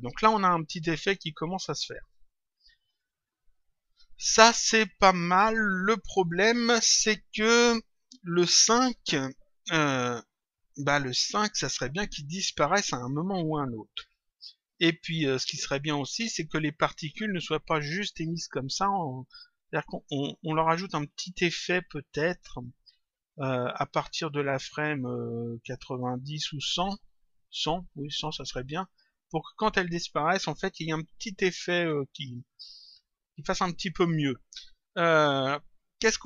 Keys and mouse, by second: 1.9 click, 17.8 click, 20.1 click, 28.9 click.